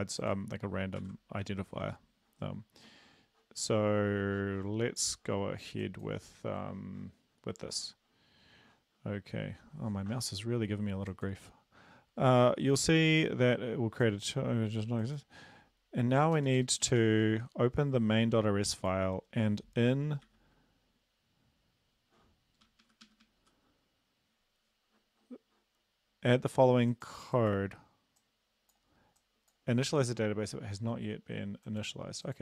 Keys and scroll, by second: 1.0 ctrl+s, 16.3 Down, 16.6 Down, 16.8 Down, 16.9 Down, 20.2 Page_Down, 22.6 Up, 22.8 Up, 23.0 Up, 23.2 Up.